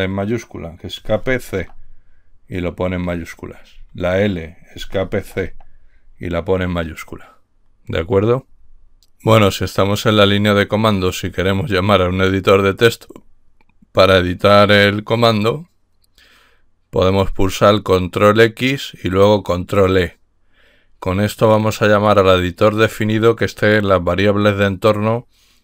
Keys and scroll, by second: 1.3 Escape, 1.8 c, 3.9 Left, 4.9 Escape, 5.5 c.